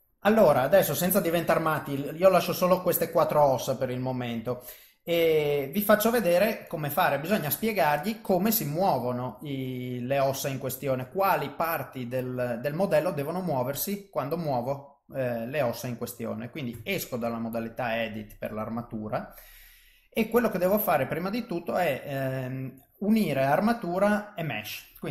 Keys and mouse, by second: 1.4 middle click, 3.3 middle click, 5.2 middle click, 7.3 middle click, 12.9 middle click, 14.0 middle click, 16.7 Tab, 17.4 middle click, 19.1 middle click, 21.1 click, 21.7 middle click.